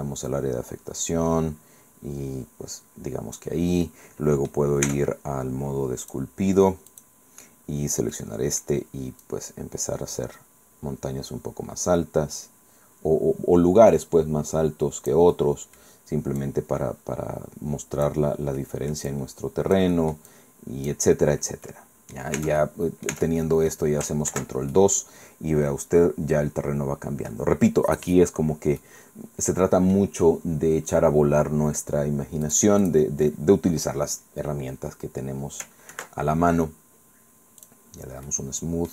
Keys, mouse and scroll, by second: 0.0-0.5 scroll down 1, 0.8 scroll down 2, 3.9 click, 3.9 scroll down 2, 4.9 Tab, 6.0 click, 7.0 click, 8.2 middle click, 8.8-9.2 scroll up 1, 9.2-15.3 drag, 15.4 middle click, 15.4-16.4 scroll down 1, 16.4-18.3 drag, 18.6 scroll down 1, 18.6 middle click, 19.1-21.1 drag, 21.4 scroll down 1, 21.7 middle click, 22.4 Tab, 22.6 middle click, 23.2 Tab, 23.2 click, 23.4 middle click, 23.7 click, 24.3 ctrl+2, 24.8 ctrl+middle click, 24.9-27.5 drag, 28.8 click, 28.9 scroll down 2, 30.4-30.9 scroll up 2, 30.9 scroll down 2, 32.5 click, 36.0 ctrl+2, 37.6 click, 38.3 middle click.